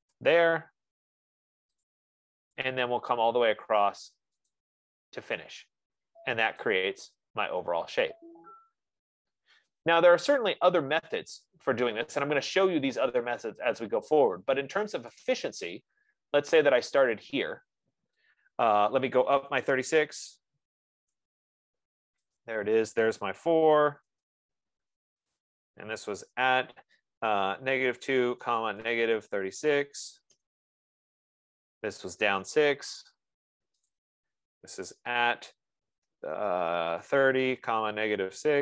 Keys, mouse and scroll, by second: 0.0-0.7 typing, 2.3 click, 4.1 F15, 5.0 click, 7.1 click, 11.2-11.9 scroll, 11.9 scroll, 15.6 click, 16.6 click, 17.4 click, 20.1-21.7 typing, 22.8 click, 23.5-24.9 typing, 25.7 click, 26.4-30.5 typing, 32.4-33.2 typing, 34.3 click, 35.2-36.0 typing, 37.1-38.6 typing.